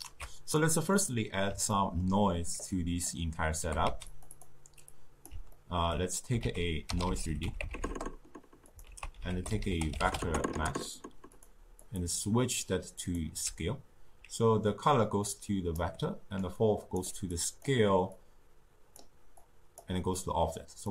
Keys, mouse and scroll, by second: 0.9-2.5 middle drag, 2.5-3.5 drag, 3.5 g, 4.2 drag, 4.8 click, 5.4 ctrl+middle click, 6.3 ctrl+a, 8.8 ctrl+a, 11.7-14.8 drag, 16.3-17.2 alt+right drag, 17.2 click, 18.0-20.9 drag.